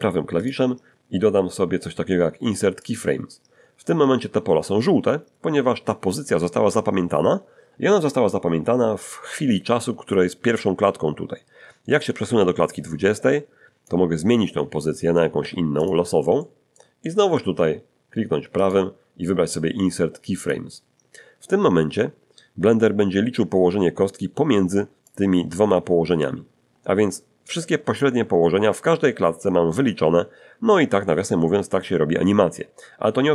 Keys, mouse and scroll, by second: 0.4 right click, 2.8 click, 11.9-14.1 drag, 14.8 middle click, 15.4 g, 15.8 click, 16.4 middle click, 18.6 right click, 20.4 click, 23.0-23.5 scroll up 1, 23.6-24.2 scroll up 1, 25.1-33.3 drag.